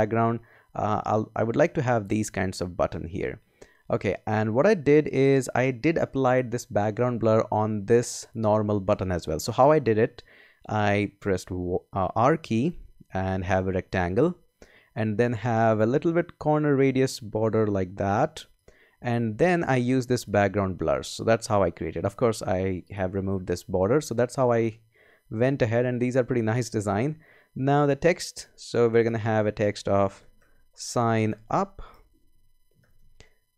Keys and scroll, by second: 10.9 r, 25.5 Escape, 27.9 t, 29.9-33.5 typing.